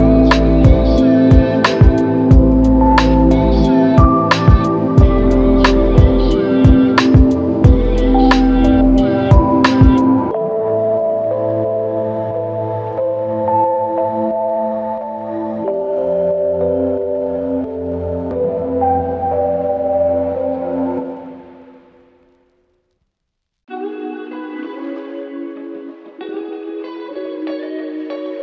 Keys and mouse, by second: 5.4 alt+click, 11.4 shift+click, 13.5 shift+click, 14.6 shift+click, 16.3 alt+click, 18.7 alt+click, 20.3 alt+click, 21.8 alt+click, 23.9 shift+click, 24.9 alt+click, 26.3 ctrl+z.